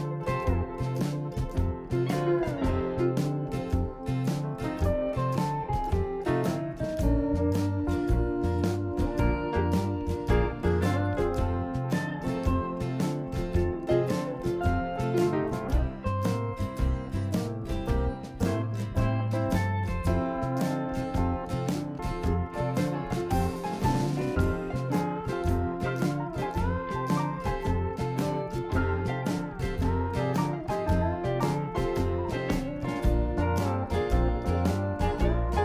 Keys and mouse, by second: 4.1 KP_7, 6.2 click, 6.7 shift+a, 8.2 s, 10.3 d, 10.7 f, 11.0-12.1 drag, 11.6 i, 14.6 a, 14.7 a, 15.2 a, 16.3 b, 17.2 p, 18.1 Tab, 18.9 click, 19.4 Tab, 20.3 a, 20.5 a, 20.9 ctrl+n, 22.4 click, 22.7-23.8 right drag, 23.8-24.9 drag, 27.7 click, 27.9-29.0 right drag, 29.0 x, 33.4-34.5 drag, 35.3-35.6 drag.